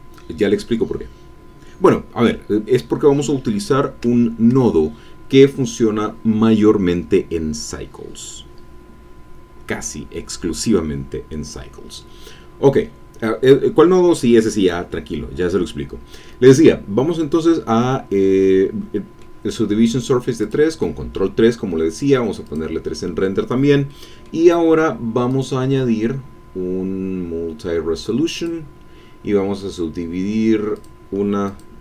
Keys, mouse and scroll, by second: 18.4 middle click, 20.4 click, 22.4 click, 23.5 scroll up 2, 23.8 middle click, 25.2 click, 28.3 click, 30.7 click, 31.4 click.